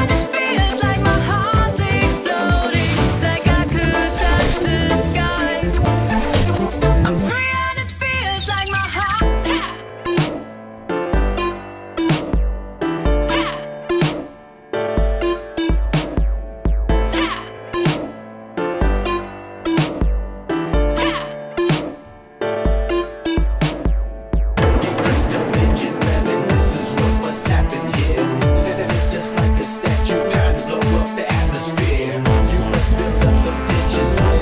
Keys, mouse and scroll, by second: 1.0 click, 9.3 middle click, 11.2 alt+middle click, 12.6 scroll up 1, 22.1 alt+click, 28.4 alt+click, 29.9 alt+click, 30.9 click, 31.9 click, 33.5 click.